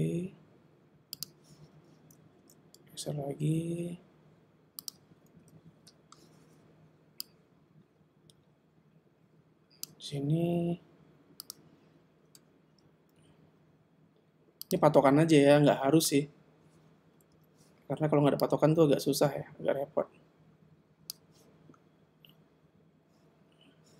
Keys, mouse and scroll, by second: 1.2 click, 2.4 g, 5.5 i, 7.3 click, 11.4 click, 12.7 g, 17.3 i, 18.5 click.